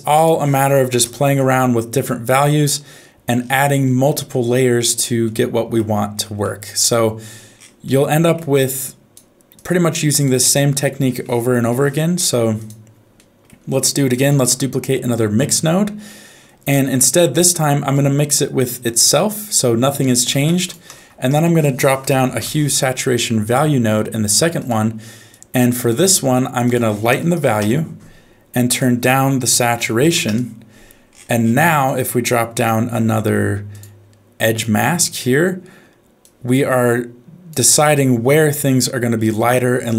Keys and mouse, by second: 0.2 click, 2.5 middle click, 4.3 shift+middle click, 5.2 middle click, 6.5 middle click, 7.8 middle click, 8.7 click, 9.6 click, 11.6 n, 12.6 click, 13.1 middle click, 14.3 shift+d, 16.1 middle click, 17.9-19.1 drag, 20.4 shift+a, 25.3 click, 26.7 click, 28.7-30.2 drag, 31.6 middle click, 32.6 f, 34.7 click, 36.3-37.5 drag.